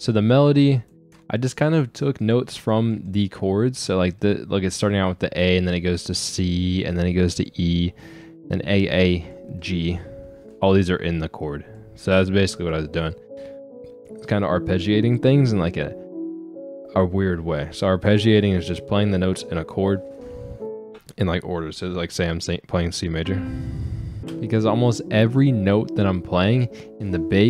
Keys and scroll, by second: 24.2 space.